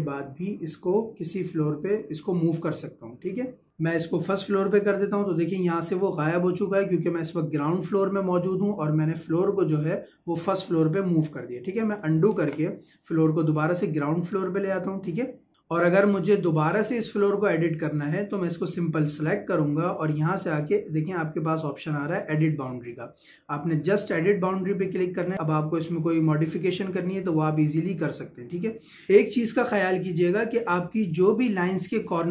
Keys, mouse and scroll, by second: 4.0 click, 11.7 click, 12.4 ctrl+z, 14.3 click, 18.4 click, 24.0 click, 27.6-29.1 scroll up 1, 31.9 scroll down 1, 32.1-32.3 scroll up 1.